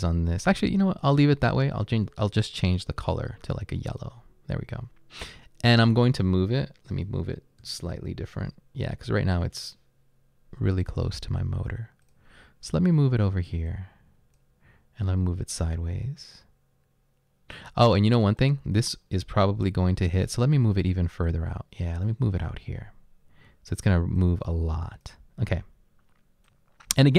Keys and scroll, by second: 7.4-9.6 typing.